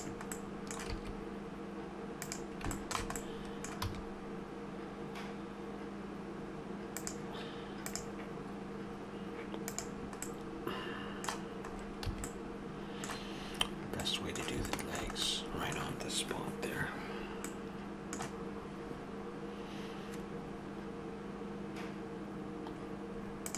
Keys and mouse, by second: 0.4 middle click, 0.9 s, 3.8 e, 12.1 a, 23.4-23.5 drag.